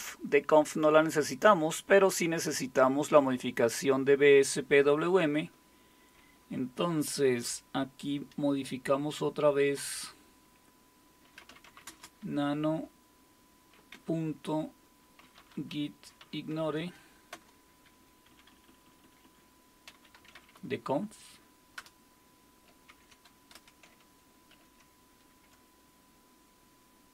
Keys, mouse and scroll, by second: 11.2-12.3 typing, 13.9 typing, 15.0-16.2 typing, 16.6 Tab, 17.3 Return, 18.3 Down, 18.5 Down, 18.7 Down, 18.8 Down, 19.0 Down, 19.6-21.1 typing, 21.8 Return, 22.9 ctrl+o, 23.5 Return, 24.5 ctrl+x.